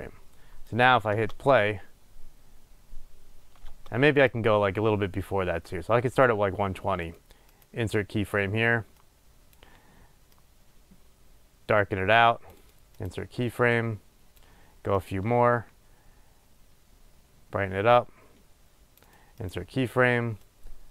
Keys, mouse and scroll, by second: 1.0-7.9 drag, 1.4 space, 4.0 space, 7.9-9.3 right drag, 9.3-13.3 drag, 13.3-14.0 right drag, 14.0-19.8 drag, 19.8-20.8 right drag, 20.8-20.9 drag.